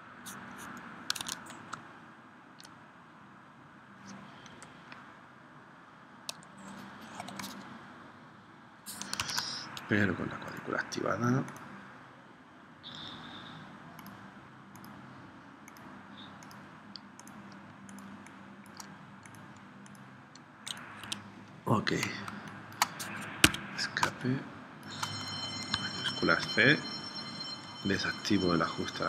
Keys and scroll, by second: 1.2 super+Tab, 4.5 p, 9.3 super+z, 18.2 space, 21.2 Escape, 22.3 space, 23.6 Escape, 24.0 space, 26.0 shift+c.